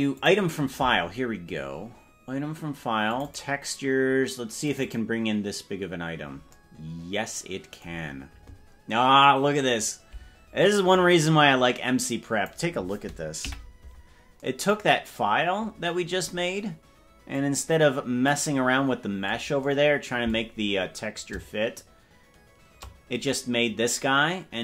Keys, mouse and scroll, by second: 0.2 click, 9.8-13.3 drag, 13.6 KP_Decimal, 17.4-18.4 drag, 21.7-22.9 shift+drag.